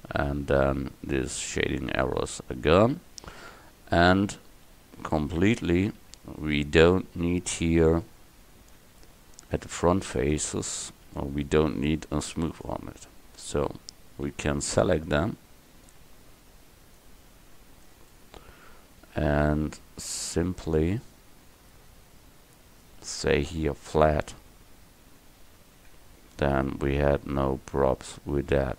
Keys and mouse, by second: 0.3-1.5 middle drag, 1.5 right click, 2.6 middle click, 3.5 KP_0, 3.7 KP_1, 8.9 Tab, 9.6 Tab, 10.4 Tab, 12.6-14.6 drag, 14.6 c, 24.1-26.0 drag, 26.0 Tab.